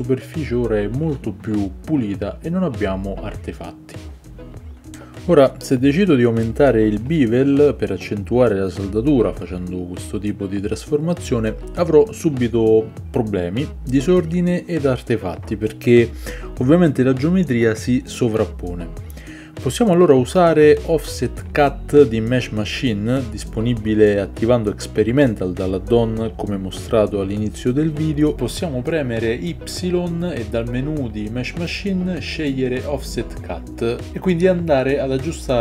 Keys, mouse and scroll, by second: 0.7-5.4 drag, 0.7-35.6 middle drag, 5.4 ctrl+z, 7.2 ctrl+b, 18.8 Tab, 20.2 click, 28.0 ctrl+z, 32.6-35.6 drag.